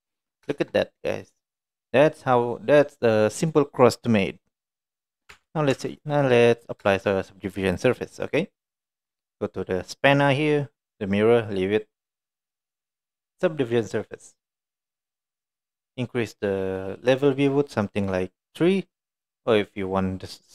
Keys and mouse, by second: 0.5 shift+middle drag, 0.8-1.3 middle drag, 1.6 middle click, 2.2-4.1 middle drag, 4.7-5.3 middle drag, 5.4 Tab, 5.8 Tab, 6.0 click, 6.3 middle drag, 7.9 click, 12.7-14.6 drag, 15.1 middle drag, 17.3 click, 17.9 click, 19.7 click.